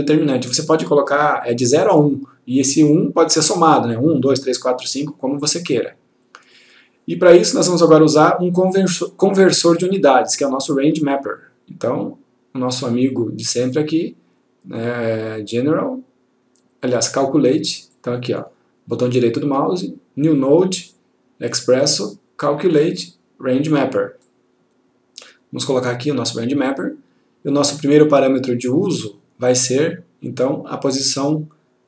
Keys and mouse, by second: 10.3 right click, 18.0 click, 18.5 right click, 24.3 click.